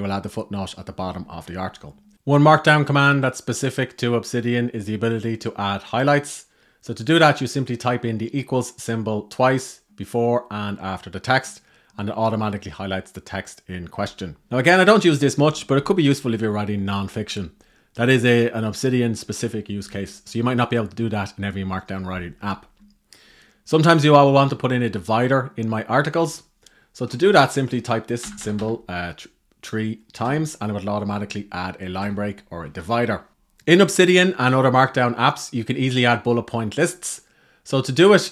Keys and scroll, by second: 2.0 Right, 14.4 Right, 32.5 Down.